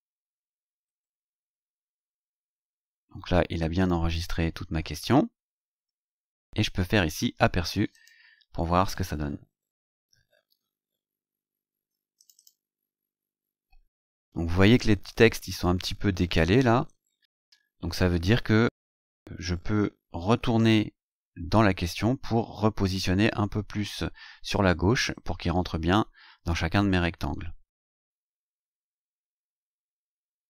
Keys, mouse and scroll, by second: 0.9-1.3 scroll down 2, 1.7-2.8 scroll down 6, 3.1-5.8 scroll down 10, 7.9 click, 12.2 click.